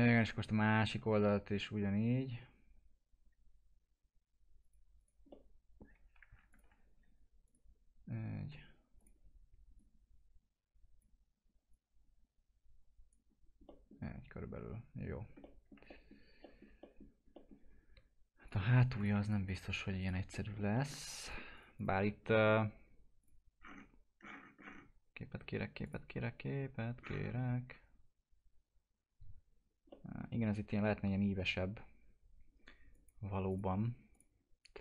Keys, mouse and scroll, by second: 4.6 click, 5.3 middle click, 6.5-13.3 ctrl+drag, 13.3-13.7 scroll down 1, 13.7 middle click, 14.0-14.6 scroll down 1, 15.4 alt+middle click, 18.5 click, 19.2 ctrl+click, 20.3 alt+middle click, 21.2 ctrl+click, 23.6-24.2 scroll down 1, 25.8 click, 27.0-27.7 scroll up 1, 29.5 scroll down 1, 29.9-32.9 alt+middle drag, 32.9 click.